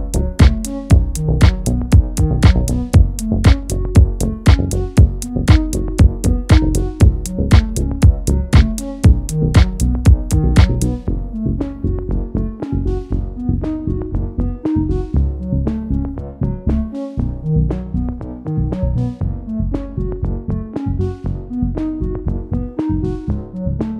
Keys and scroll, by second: 16.2 space.